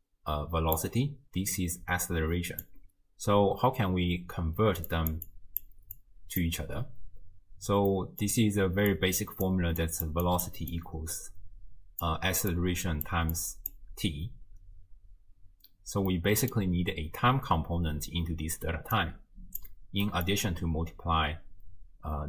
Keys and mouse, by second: 1.5-2.7 drag, 2.7 d, 2.7 d, 2.8 d, 4.6-6.5 typing, 4.9 click, 5.3 click, 6.0 click, 7.9 click, 8.4 d, 8.9-9.7 d, 8.9 click, 9.8 click, 9.8-13.9 d, 10.3 click, 10.8-12.1 drag, 12.5 click, 13.3 click, 16.1 middle click, 19.0 click, 20.1 middle click.